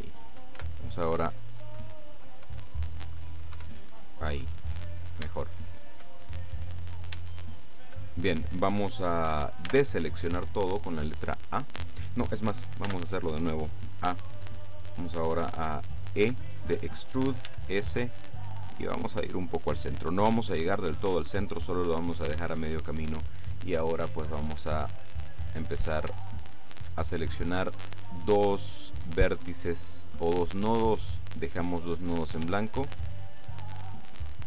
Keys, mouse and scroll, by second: 0.6 Tab, 2.5 KP_7, 3.6 KP_5, 4.4-5.3 scroll down 2, 5.3 shift+scroll down 1, 5.4 shift+middle click, 6.2-6.8 shift+scroll up 3, 6.8-7.4 scroll down 3, 7.4 shift+middle click, 9.8 a, 13.0 a, 16.4 e, 17.6 s, 20.7 click, 25.3 right click, 26.5 shift+right click, 32.8 shift+right click, 33.5 right click.